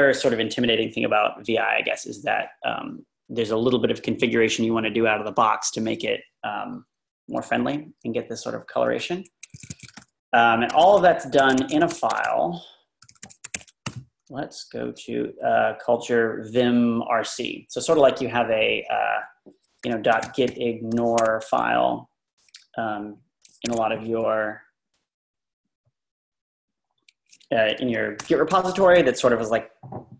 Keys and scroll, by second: 9.5 Escape, 9.7-13.8 typing, 19.8-21.4 typing, 22.6 Left, 22.9 Left, 23.0 Left, 23.3 Left, 23.7 ⟲.